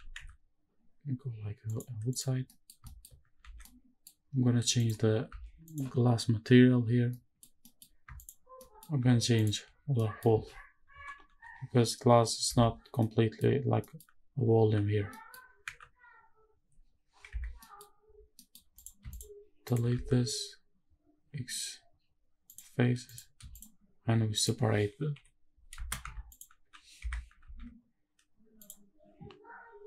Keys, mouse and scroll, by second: 0.1 x, 1.7 click, 2.1 click, 2.3 scroll down 2, 2.4 middle drag, 2.8 shift+middle drag, 3.1 scroll up 1, 3.5 ctrl+s, 3.6-4.0 middle drag, 4.8 click, 5.3 Tab, 5.6 click, 7.0 scroll down 1, 7.1 middle click, 7.6 middle click, 8.1 shift+click, 8.6 middle click, 9.4 shift+click, 9.9 middle click, 10.9 ctrl+l, 11.3 g, 12.4 Escape, 13.0 middle click, 13.8 middle click, 14.1-15.1 scroll up 2, 15.1 middle click, 15.6 x, 17.5 scroll down 1, 17.6 middle click, 18.4 middle click, 18.8 click, 19.1 shift+click, 19.6 shift+click, 19.9 x, 23.1 click, 24.3 shift+click, 25.1 p, 26.0 Tab, 26.3 click, 26.6 g, 27.0 Escape, 27.4 ctrl+a.